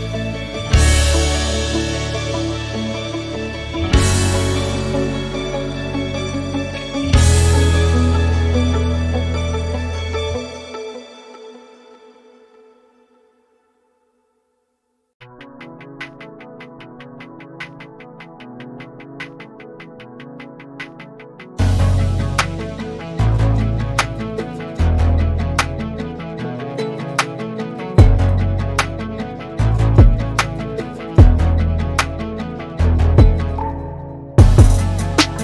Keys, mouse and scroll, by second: 0.1 g, 0.7 click, 2.3-3.5 scroll up 2, 4.0 r, 5.0 r, 7.9 scroll down 2, 8.0-9.3 middle drag, 9.3 click, 10.1 middle click, 10.5 KP_7, 11.8-12.5 scroll up 2, 12.7 r, 13.9 click, 15.5 shift+d, 16.3 click, 17.7 scroll down 1, 18.1 r, 23.6 drag, 24.7 drag, 25.8-27.6 middle drag, 28.3-28.9 middle drag, 28.9 KP_7, 29.7 scroll up 2, 30.2-30.9 middle drag, 30.9 KP_7, 31.5-32.4 shift+middle drag, 32.4 drag, 33.3 r, 34.4 drag.